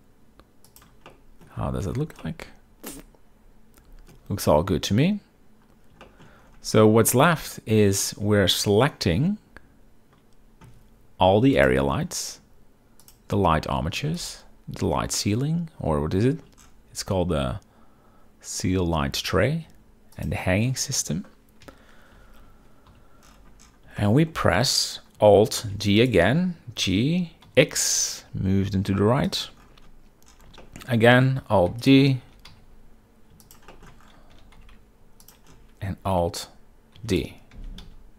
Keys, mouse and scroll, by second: 1.2-1.6 middle drag, 1.7 z, 2.3-4.2 middle drag, 6.2 shift+middle drag, 6.9-7.4 middle drag, 11.7 shift+click, 13.1 shift+click, 14.3 shift+click, 20.3 shift+click, 21.7 KP_7, 23.0 z, 24.1 shift+drag, 25.7 alt+d, 26.9 g, 27.6 x, 30.7 shift+drag, 31.8 alt+d, 32.4 g, 32.6 x, 33.8 shift+middle drag, 34.5 g, 34.7 x, 37.1 alt+d, 37.6 g, 37.9 x.